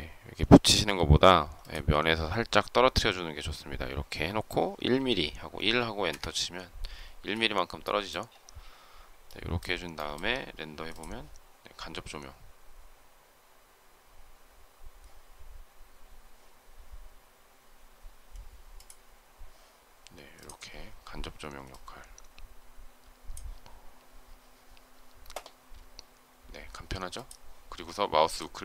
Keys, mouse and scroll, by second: 0.3 m, 6.0 Return, 7.0 space.